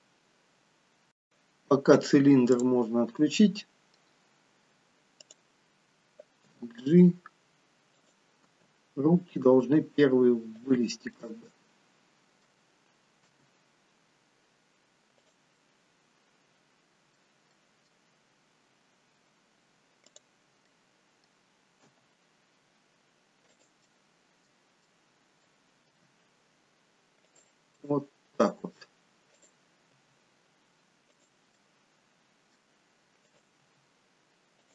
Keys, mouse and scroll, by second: 0.8-1.4 scroll up 3, 2.5 click, 3.1 middle click, 4.1-4.8 scroll down 2, 5.2 click, 6.5 g, 8.5 g, 11.1 middle click, 12.1 middle click, 13.2 r, 15.7 middle click, 17.5 middle click, 18.5-18.9 scroll up 3, 18.9-19.5 scroll down 1, 20.0 click, 20.0 scroll down 1, 20.6 middle click, 21.7 g, 23.8 middle click, 24.8 middle click, 25.8 r, 27.8 middle click, 29.3 click, 30.0 r, 31.5 middle click, 33.1 click, 33.5 r.